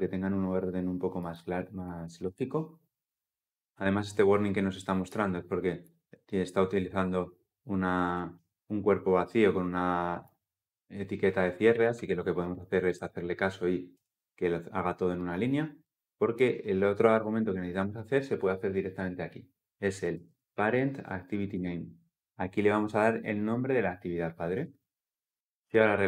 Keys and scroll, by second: 2.0 ctrl+v, 12.6 alt+Return, 21.3 Return, 25.3 Return, 25.5 shift+F10.